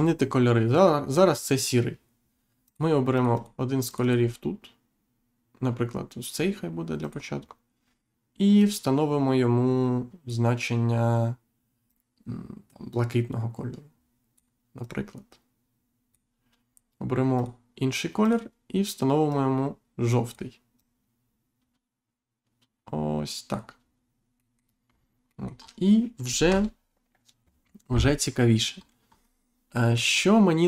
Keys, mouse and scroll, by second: 2.6 click, 3.9 click, 7.0 click, 8.6 click, 11.8 click, 14.8 click, 17.3 click, 18.2 click, 19.3 click, 24.3 middle click, 24.8-25.2 scroll down 1, 25.2 middle click, 26.4 Insert, 28.7-29.1 scroll down 1, 29.1 scroll up 1, 29.7 middle click, 30.1-30.5 scroll up 1.